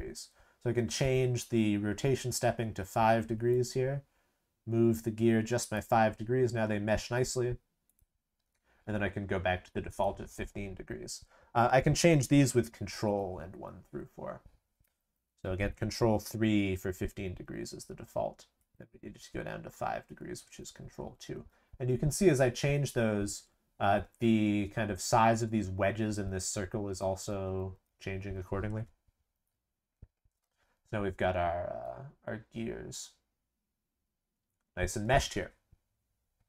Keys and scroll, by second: 12.8 ctrl+1, 13.3 ctrl+2, 13.8 ctrl+3, 14.8 ctrl+4, 16.0 ctrl+3, 18.5 ctrl+2, 19.6 ctrl+3, 20.3 ctrl+2, 21.1 ctrl+3, 21.6 ctrl+4, 22.1 ctrl+3, 23.0 ctrl+2, 23.5 ctrl+1, 24.6 ctrl+2, 25.0 ctrl+3, 25.6 ctrl+4, 26.0 ctrl+3, 26.3 ctrl+2, 26.7 ctrl+1, 27.2 ctrl+2, 27.6 ctrl+3, 27.8 ctrl+4, 29.3 ctrl+3.